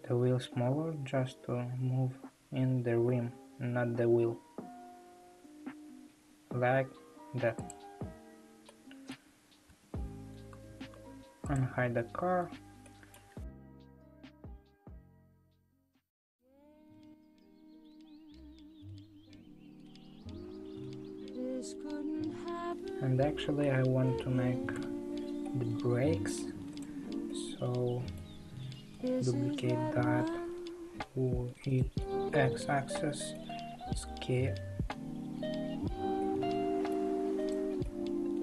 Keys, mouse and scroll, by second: 8.2 scroll down 2, 8.7-9.7 middle drag, 9.7 a, 10.8 alt+h, 11.6 click, 11.8-12.4 scroll down 4, 12.4 Tab, 12.8-15.4 middle drag, 15.4 click, 16.0-19.1 middle drag, 21.5 click, 22.2 Tab, 23.6 l, 24.7 h, 25.4-26.8 middle drag, 26.8-27.3 drag, 27.3-29.2 middle drag, 29.2 shift+d, 32.0-33.7 middle drag, 33.7 s, 36.2-37.4 middle drag, 37.4 click, 37.8-38.4 middle drag.